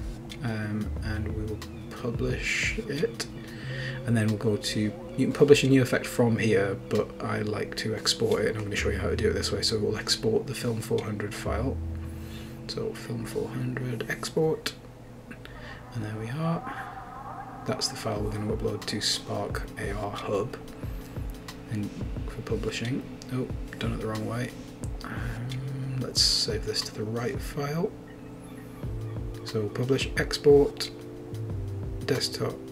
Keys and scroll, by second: 14.8-16.6 typing, 23.6 super+Up, 24.0 super+scroll up 1, 25.0 super+scroll down 1.